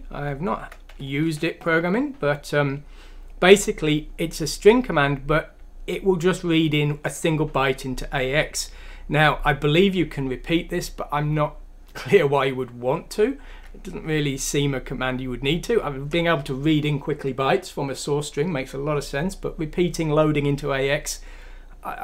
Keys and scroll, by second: 0.6 Escape, 1.3 F3.